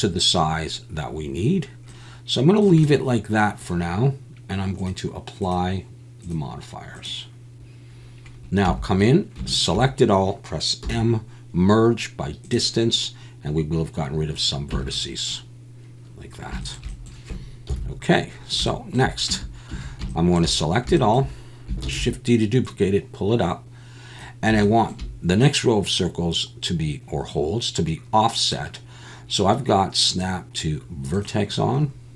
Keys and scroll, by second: 8.7 Tab, 10.8 m, 14.7 Tab, 17.7 KP_1, 19.3 Tab, 19.7 a, 21.8 shift+d.